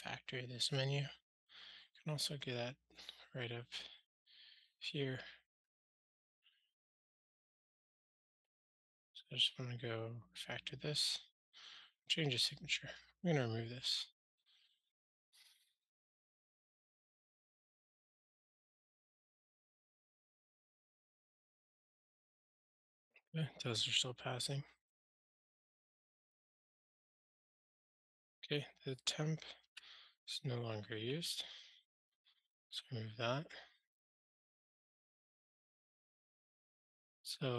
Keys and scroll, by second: 6.4 ctrl+alt+shift+t, 10.9 ctrl+alt+shift+t, 12.2 super+F6, 18.1 super+c, 19.0 super+v, 20.0 ctrl+alt+shift+r.